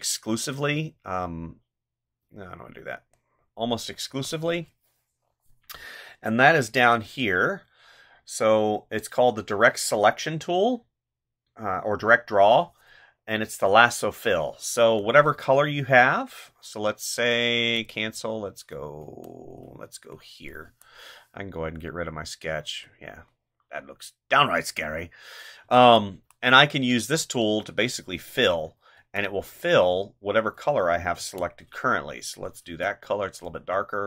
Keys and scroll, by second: 0.7 ctrl+z, 4.1 space, 14.7 space, 19.0 space, 25.6 space, 28.6 ctrl+z, 31.2 space.